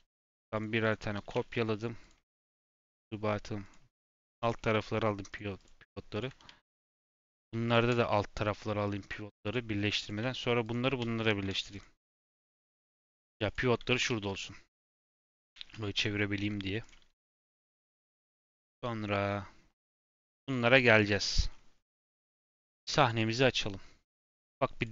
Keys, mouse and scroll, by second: 0.2 click, 0.5 click, 0.8 shift+click, 1.1 shift+d, 3.6 click, 5.2 click, 5.5 click, 6.1 shift+click, 7.0 click, 7.3 click, 7.6 shift+click, 9.0-9.5 drag, 9.9 click, 10.6 shift+click, 11.2 ctrl+j, 11.7 click, 12.1 shift+click, 12.8 ctrl+j, 13.1 click, 13.4 click, 13.8 r, 15.1 click, 15.3 r, 16.3-16.8 scroll down 5, 16.8 click, 17.1-18.6 middle drag, 18.6 click, 19.1-20.0 middle drag, 20.0-21.4 scroll up 1, 21.4 scroll down 1, 21.7 scroll up 1, 24.7 click.